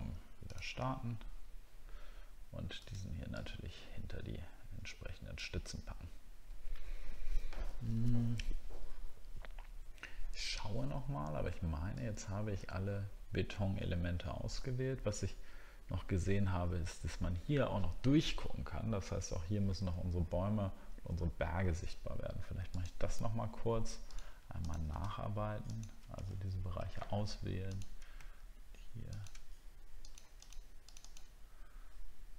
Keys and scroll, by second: 21.1 alt+scroll up 1, 26.3 alt+scroll up 1.